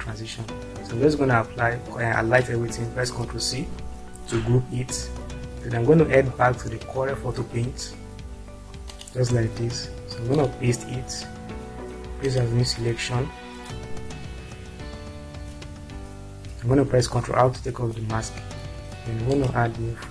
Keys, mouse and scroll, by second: 0.7-2.4 drag, 3.8 ctrl+c, 7.2 click, 9.2 click, 17.3 ctrl+r, 19.3 click.